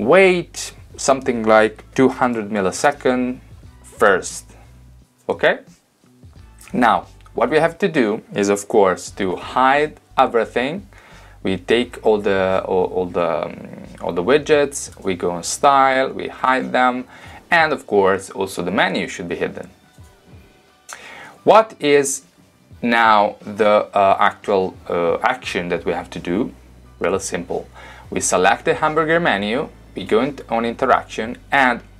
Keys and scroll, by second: 1.9-2.8 typing, 3.0 Tab.